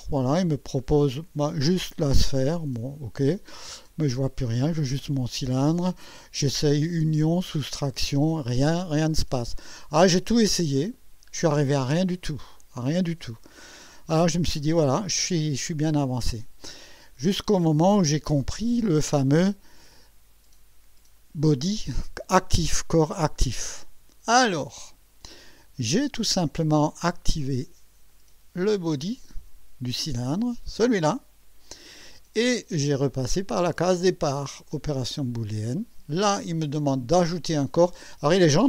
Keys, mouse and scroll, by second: 2.4 click, 3.8-5.9 drag, 6.5 click, 7.1 click, 8.3-9.4 drag, 10.0 click, 10.7 click, 12.0-13.7 drag, 14.8-15.5 right drag, 19.3 click, 23.6 click, 27.2 right click, 28.1 click, 29.2 click, 35.0 click.